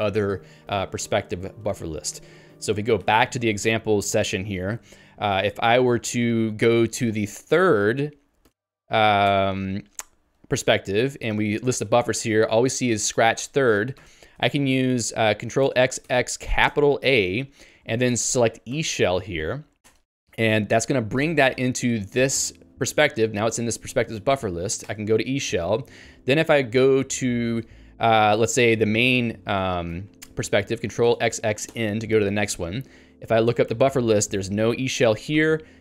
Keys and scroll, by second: 3.0 Return, 14.0 ctrl+g, 20.0 Return, 22.4 ctrl+j, 22.6 ctrl+k, 25.0 Return, 35.5 ctrl+g.